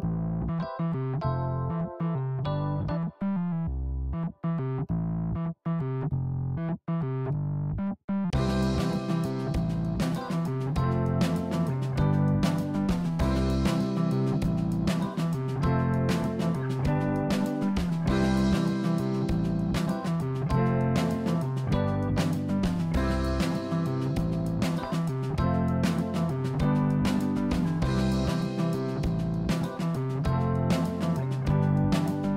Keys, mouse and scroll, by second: 1.0-1.6 scroll down 1, 1.6 KP_1, 3.6-5.0 scroll up 3, 5.0-5.8 scroll up 2, 5.8-7.4 drag, 16.4 Tab, 17.3 click, 17.5 Tab, 17.8 click, 18.6 click, 22.1 s, 25.8 click, 26.3-28.0 middle drag.